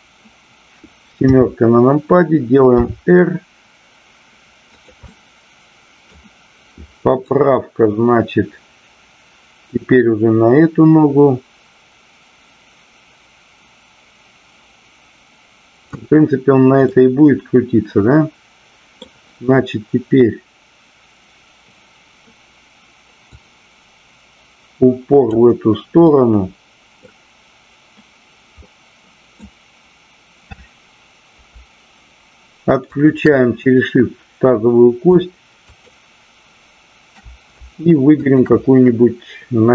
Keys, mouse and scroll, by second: 1.2 KP_7, 2.7 r, 4.7 click, 5.0-6.1 middle drag, 7.2-15.8 drag, 16.8-19.0 middle drag, 23.2-25.4 drag, 26.0 scroll up 1, 26.1-27.0 middle drag, 28.5 scroll up 1, 28.7-29.3 middle drag, 32.8-33.7 shift+drag, 35.7 shift+click, 38.2 shift+click.